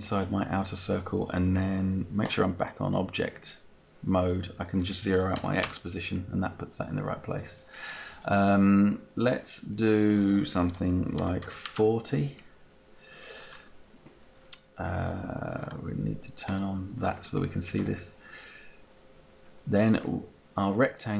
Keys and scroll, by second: 5.4 0, 5.7 Return, 10.9-11.8 typing, 12.6 Return.